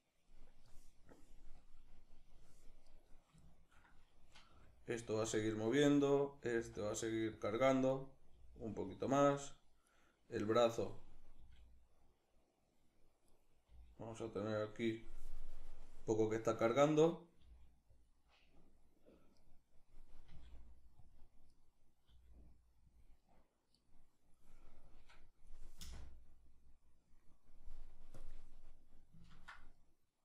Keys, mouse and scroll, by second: 2.5 right click, 3.1-5.1 shift+middle drag, 4.1 r, 5.1 click, 5.5 right click, 6.3 r, 7.1 click, 7.5 right click, 8.0 r, 8.7 click, 9.5-11.1 right drag, 11.1 r, 13.0 right click, 13.3 g, 14.0 click, 16.5 right click, 17.0 g, 17.7 click, 19.0 right click, 19.9 r, 20.7 click, 21.1 right click, 21.7 r, 22.6 click, 24.5-27.9 drag, 25.5 space, 28.9-29.9 ctrl+middle drag.